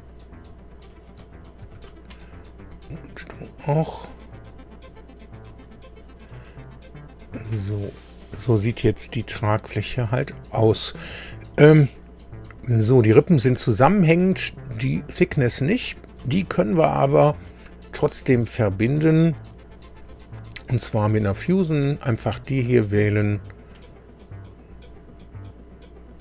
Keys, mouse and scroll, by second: 0.8 click, 1.6 ctrl+d, 3.1-4.8 drag, 5.5 click, 6.3-8.6 middle drag, 10.1 middle click, 11.2 shift+middle click, 14.9 click, 15.8 shift+click, 22.9 click, 26.1 click.